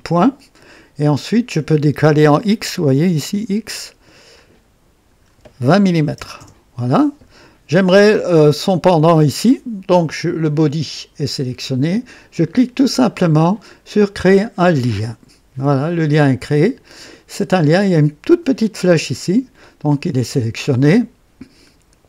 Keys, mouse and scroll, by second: 4.3 click, 6.0 KP_2, 6.2 KP_0, 6.4 KP_Enter, 7.5 typing, 15.1 click.